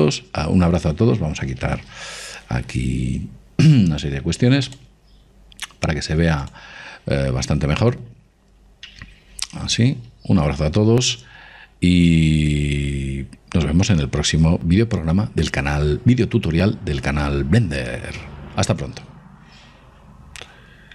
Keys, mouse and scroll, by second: 3.5 n, 6.1 click, 10.3 n.